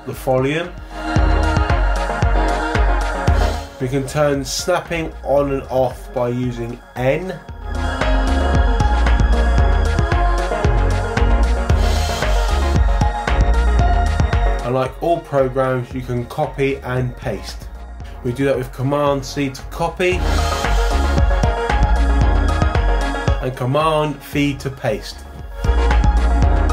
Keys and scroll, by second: 6.8 n, 15.3 n, 19.2 super+c, 24.3 super+v.